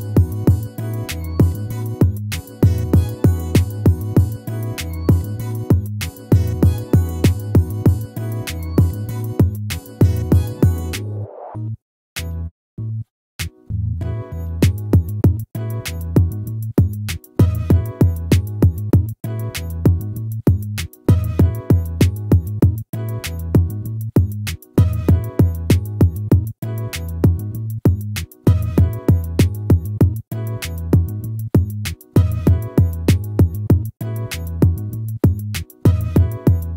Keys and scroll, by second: 12.6 ctrl+-, 14.8 ctrl+-, 35.6 ctrl++.